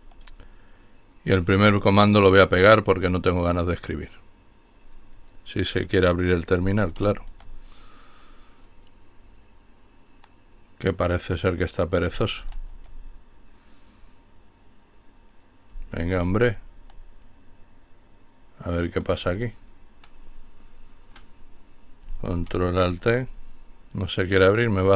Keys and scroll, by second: 1.0 ctrl+alt+t, 6.4 ctrl+alt+t, 11.6 ctrl+alt+t, 15.4 ctrl+alt+t, 21.4 ctrl+alt+t.